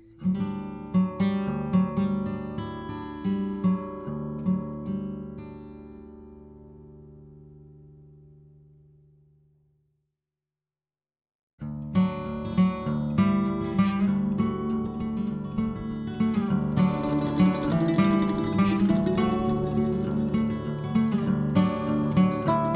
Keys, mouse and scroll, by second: 10.8-11.9 middle drag, 17.9-19.4 middle drag, 20.5 c.